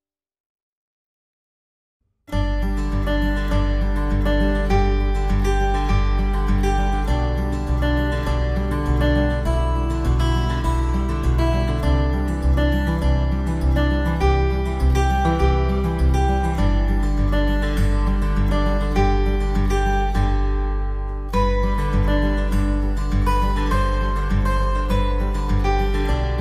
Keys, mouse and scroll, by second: 0.9 shift+click, 1.1 right click, 1.3 w, 1.6 click, 3.3 click, 3.4 click, 3.5 w, 3.7 click, 4.9 Delete, 5.4 click, 6.0 click, 6.1 click, 6.3 double click, 6.4 double click, 6.8 double click, 7.2 middle click, 7.4 click, 7.5 middle click, 7.5 middle click, 7.5 scroll down 1, 7.7 click, 8.3 typing, 9.0 click, 10.2 click, 12.1 click, 13.1 click, 13.3 alt+w, 13.6 alt+middle click, 13.7 alt+middle click, 13.8 alt+middle click, 14.1 click, 14.3 alt+middle click, 14.4 alt+middle click, 14.5 F4, 14.7 alt+middle click, 15.0 click, 15.4 alt+middle click, 15.7 alt+middle click, 15.9 click, 16.2 click, 16.3 r, 16.8 click, 17.4 alt+middle click, 17.5 alt+middle click, 17.6 alt+middle click, 18.0 shift+click, 18.1 shift+click, 18.4 ctrl+z, 18.8 s, 19.2 shift+click, 20.1 shift+click, 21.1 shift+click, 21.3 click, 21.3 ctrl+z, 21.3 click, 21.7 alt+middle click, 22.1 double click, 22.3 alt+middle click, 22.4 alt+middle click, 22.5 alt+middle click, 22.8 alt+middle click, 22.9 alt+middle click, 23.3 click, 23.6 alt+middle click, 23.9 double click, 24.3 click, 24.8 alt+middle click, 25.2 alt+middle click, 25.2 shift+click, 25.6 shift+click, 25.8 shift+click, 26.2 alt+w.